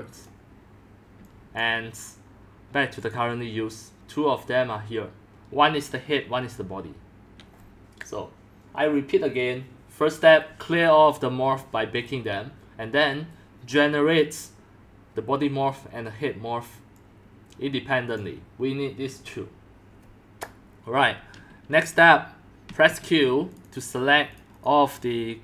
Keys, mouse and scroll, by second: 1.1 c, 1.6 click, 2.0-3.8 drag, 5.9-8.2 drag, 16.9-20.5 drag, 22.8 q, 23.6 click, 23.7 click, 24.3 click, 24.6 click.